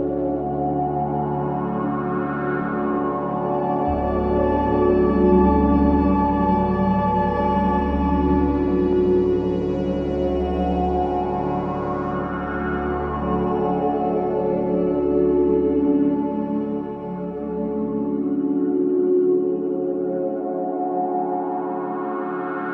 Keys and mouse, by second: 0.8 g, 1.4 click, 1.8 space, 3.4 space, 4.2 click, 4.6 space, 6.4 g, 8.0-9.2 drag, 9.4 g, 10.0-11.5 drag, 11.8 space, 13.1-13.4 typing, 17.3 click, 18.9 click, 19.4 click.